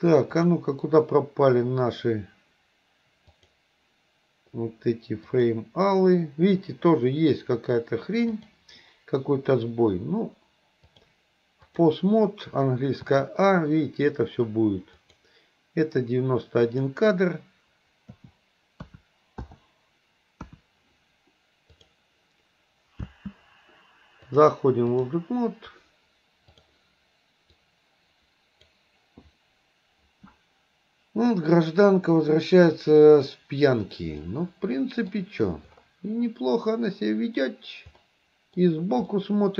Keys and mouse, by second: 0.5-3.2 drag, 3.3-5.5 drag, 8.5 click, 11.0 click, 13.2 a, 15.1 click, 16.8 click, 20.4 KP_1, 21.7 click, 23.1 space, 24.3-25.2 drag, 26.7-28.8 drag, 31.4-33.4 middle drag, 34.3-35.2 middle drag, 38.1 middle click, 39.2-39.5 middle drag.